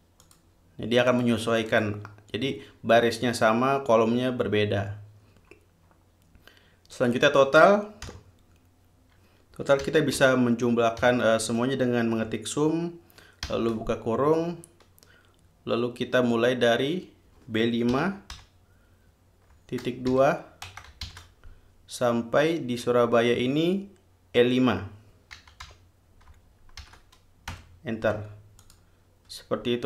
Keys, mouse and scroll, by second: 0.5 click, 1.3 click, 1.9 click, 7.2 click, 8.3 =, 10.0 s, 10.4 u, 11.3 m, 13.7 shift+9, 18.1 b, 18.6 5, 20.3 shift+;, 20.9 BackSpace, 21.3 shift+;, 25.6 e, 25.9 5, 27.0 shift+0, 27.7 Return, 28.8 click.